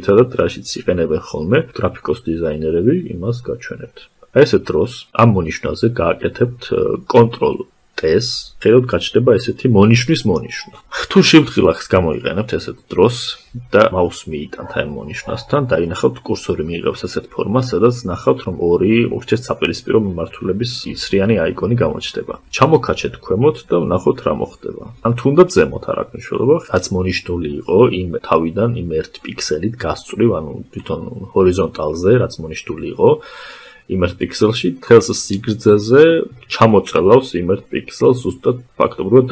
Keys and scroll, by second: 8.2 ctrl+t.